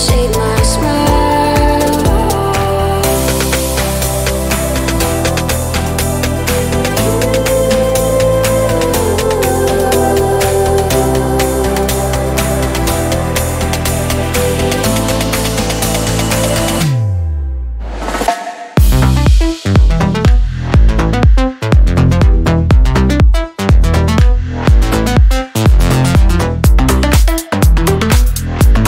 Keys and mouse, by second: 0.2 click, 0.7 ctrl+a, 4.5 drag, 6.7 click, 7.5-8.7 drag, 8.7-11.2 ctrl+middle drag, 11.2 ctrl+a, 13.1-14.3 middle drag, 14.3 ., 15.5 Tab, 16.0 a, 16.5 s, 18.0 Tab, 19.4-20.1 drag, 20.1-23.4 middle drag, 23.4 click, 24.4 click, 25.2-28.8 middle drag.